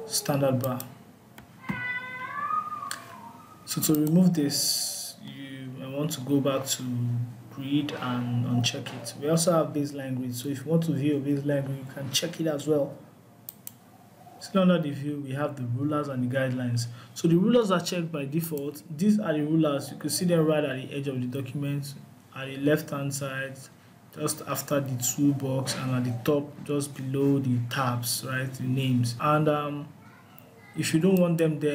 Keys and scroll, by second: 5.9 alt+y.